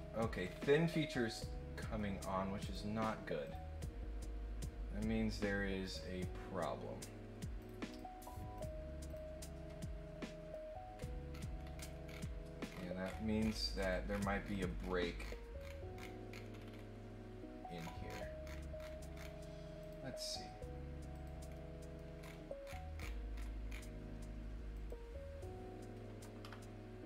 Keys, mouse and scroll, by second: 0.4-1.0 scroll up 2, 1.1 middle click, 2.6 click, 3.4 click, 5.8 click, 7.6 click, 7.9 click, 8.5 click, 9.0 click, 10.2 middle click, 10.9-11.7 scroll up 3, 11.7 scroll down 1, 12.0-14.9 scroll up 9, 12.1 middle click, 15.1-16.3 scroll down 4, 16.5 scroll up 1, 17.7-19.2 scroll down 5, 19.8 click, 21.1 click, 21.5 middle click, 22.1 scroll up 1, 22.6-23.0 scroll down 4, 23.3-23.7 scroll up 4, 24.7 click.